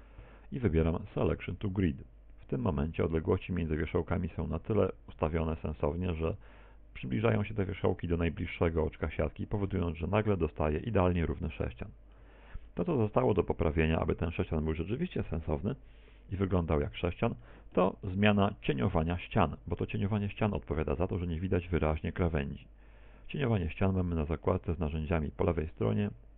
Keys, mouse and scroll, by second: 1.8 shift+s, 10.7 middle click, 12.1 a, 12.4 z, 12.8-13.3 scroll down 5, 13.3 middle click, 14.3 Tab, 14.8 middle click, 18.5 middle click, 19.5 middle click.